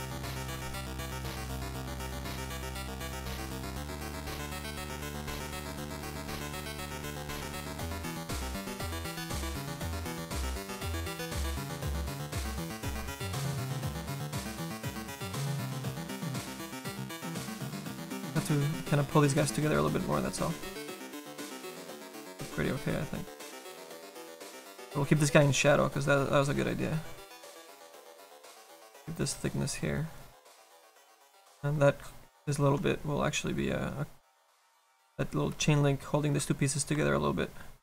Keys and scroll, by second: 0.4 7, 18.1 s, 35.1 s.